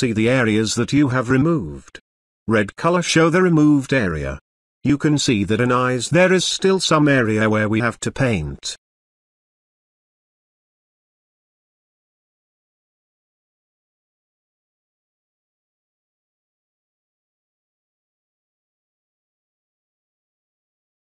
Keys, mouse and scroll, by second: 0.2 space, 0.6-1.5 ctrl+drag, 2.0 space, 2.1-2.7 ctrl+drag, 3.5-4.3 typing, 5.0-10.3 drag, 10.4 space, 11.3-12.3 click, 12.3 ctrl+space, 12.5-13.1 ctrl+drag, 14.0-16.5 ctrl+drag, 19.3 space, 19.4 ctrl+drag, 20.9 ctrl+space.